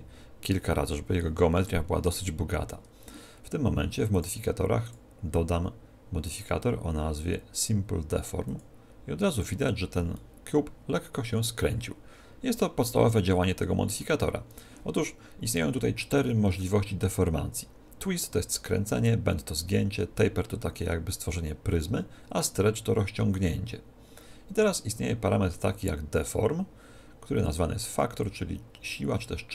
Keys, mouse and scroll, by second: 1.7 Tab, 1.9-4.1 middle drag, 4.1-6.8 drag, 10.1-16.0 middle drag, 28.2 click.